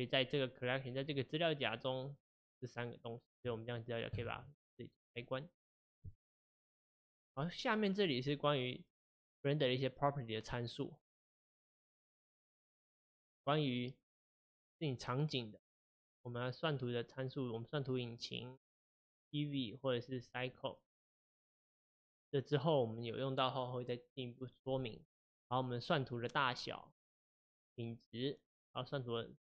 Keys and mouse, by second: 1.0 click, 2.1 click, 2.4 click, 3.4 click, 4.1 click, 5.2 click, 11.6 click, 12.9 click, 19.6-22.7 drag, 24.9 click.